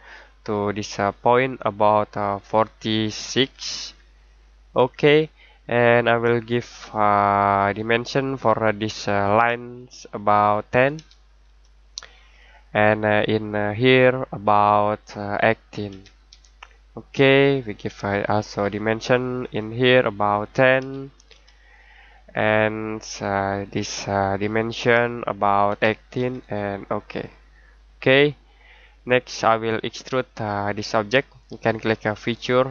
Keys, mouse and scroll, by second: 3.1-4.3 typing, 4.7 click, 7.5 click, 10.9 1, 12.3 click, 15.9 typing, 17.4 click, 20.8 typing, 22.1 click, 25.6 typing, 26.8 click.